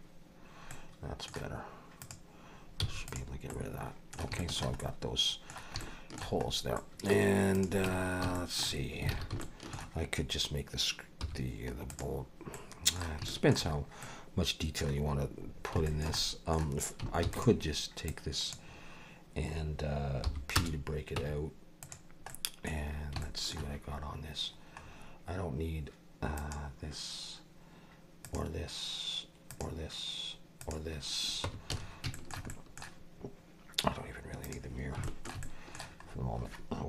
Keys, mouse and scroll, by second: 0.7 middle click, 2.0 click, 2.8 x, 3.5 middle click, 4.4 shift+middle click, 4.8 middle click, 5.8 shift+middle click, 6.5 scroll up 2, 6.8 middle click, 7.5 click, 7.9 Tab, 8.4 shift+middle click, 9.1 alt+a, 9.4 shift+middle click, 11.2 3, 11.9 click, 12.5 middle click, 13.3 shift+middle click, 13.8 scroll up 2, 14.0 middle click, 15.5 scroll down 2, 15.9 middle click, 16.2 middle click, 17.3 shift+d, 18.1 click, 20.3 p, 21.2 Tab, 21.8 click, 22.3 middle click, 22.8-23.2 scroll down 3, 23.2 shift+middle click, 24.8 scroll up 2, 26.4 click, 28.2 click, 29.5 click, 30.6 click, 31.4 Tab, 31.7 a, 32.1 shift+middle click, 32.5 middle click, 34.4 click, 35.0 shift+middle click, 35.4 middle click, 36.0 scroll up 1.